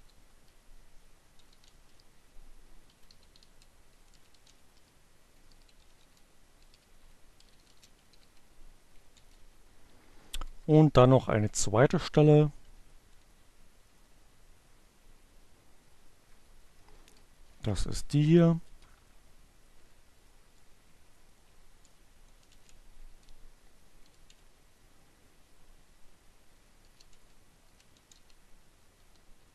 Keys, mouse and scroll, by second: 0.0-7.1 typing, 7.9 Down, 10.3 Page_Down, 11.4 Page_Down, 14.9 Down, 15.7 Return, 18.0 space, 19.8 space, 20.3 shift+-, 22.4-23.3 typing, 25.1-29.5 typing.